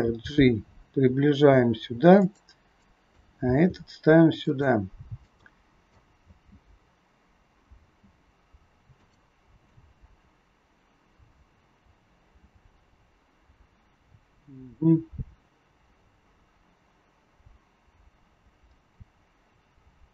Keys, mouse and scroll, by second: 0.0 click, 0.0 g, 2.8 click, 3.4 g, 5.3 click, 6.1 space, 7.8 space, 9.0 click, 9.6 click.